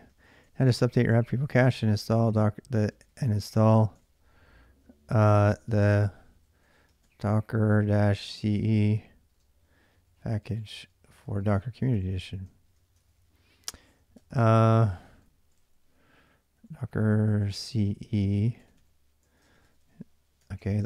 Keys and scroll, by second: 0.0-20.8 typing, 13.6 ctrl+[.